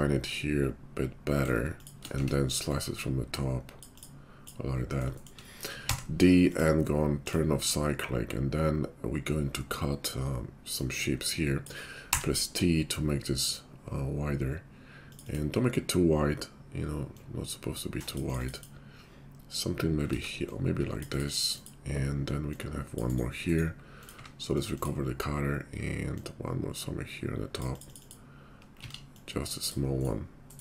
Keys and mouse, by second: 0.7 ctrl+click, 1.6-2.7 shift+middle drag, 2.1 Tab, 2.7-21.6 drag, 5.8 d, 20.1 ctrl+z, 21.6 middle click, 22.6-24.0 drag, 24.0-26.1 middle drag, 24.1 q, 26.1-30.6 drag, 28.8 ctrl+z.